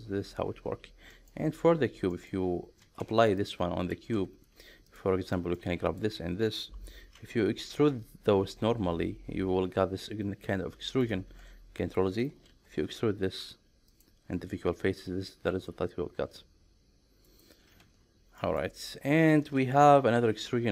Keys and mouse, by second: 1.1 middle click, 2.1 shift+middle click, 3.4 Tab, 3.4 click, 4.1 Tab, 5.3 middle click, 5.8 shift+click, 8.6 e, 11.0 right click, 11.5 ctrl+z, 12.5 alt+e, 17.3 right click, 17.8 ctrl+z, 18.4 middle click, 20.0 alt+e.